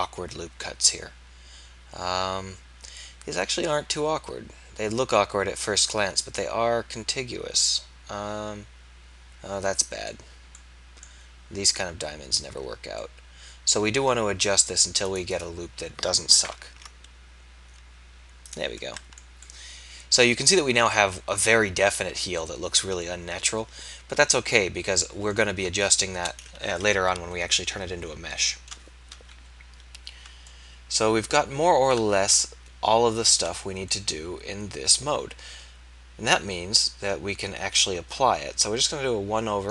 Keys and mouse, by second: 4.3-7.0 middle drag, 10.7-12.6 middle drag, 12.6 z, 16.7 ctrl+a, 29.3 KP_1.